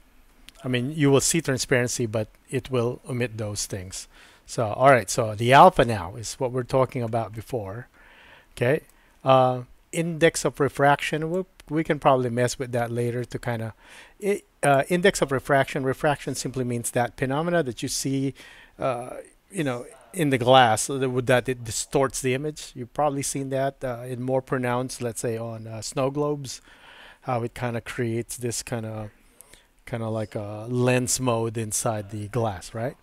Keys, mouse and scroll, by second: 7.4-8.9 middle drag, 11.4-14.7 drag.